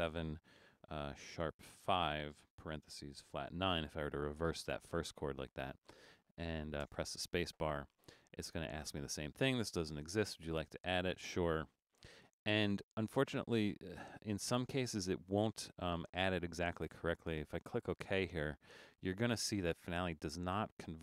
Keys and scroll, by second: 1.3-1.6 typing, 2.6-3.7 typing, 6.9 space.